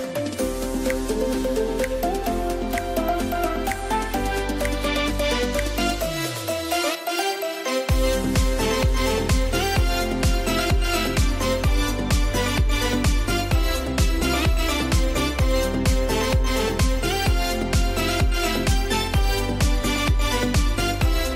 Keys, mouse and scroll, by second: 0.1 click, 1.0 [, 1.7-3.0 drag, 3.0 ctrl+z, 3.6 typing, 5.1 click, 6.0 ctrl+z, 6.4 ], 6.5-8.9 drag, 8.9 scroll down 1, 8.9-9.8 typing, 11.1 click, 13.3 typing, 16.4 click, 16.5 click, 18.7 scroll up 1, 19.6 click, 20.0 scroll down 1, 21.0-21.3 scroll up 2.